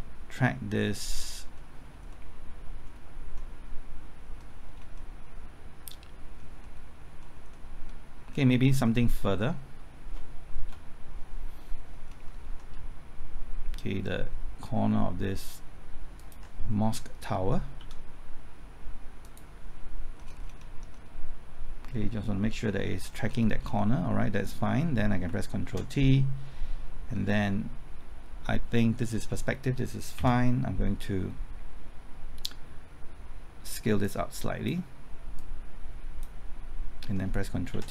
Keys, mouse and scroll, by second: 1.2-1.5 scroll up 1, 1.5-4.6 middle drag, 4.6-4.9 scroll up 1, 4.9-6.6 middle drag, 8.3-8.6 scroll down 1, 8.6 middle click, 9.4 scroll down 1, 9.5-10.6 scroll up 1, 10.6 KP_0, 11.9-12.7 scroll up 1, 12.7 typing, 16.1 ctrl+click, 17.8 s, 19.2 click, 20.1-20.6 scroll up 1, 20.6 middle click, 20.9-23.0 scroll up 1, 23.0-23.6 scroll down 1, 25.6 ctrl+t, 27.1-27.4 scroll up 1, 30.1 Left, 34.0-35.3 drag, 37.3 typing, 37.7 ctrl+t.